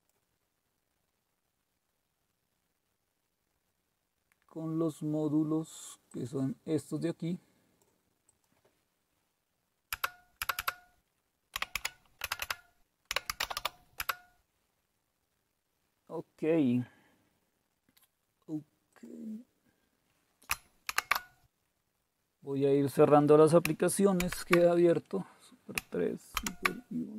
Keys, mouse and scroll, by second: 3.9-5.4 scroll down 1, 5.4-6.1 scroll down 1, 6.1-7.9 drag, 8.3-9.9 drag, 9.9 Return, 10.4 Return, 10.6 Return, 11.3-14.1 typing, 19.0 click, 20.9 shift+super+q, 24.2 super+3, 26.4 super+1.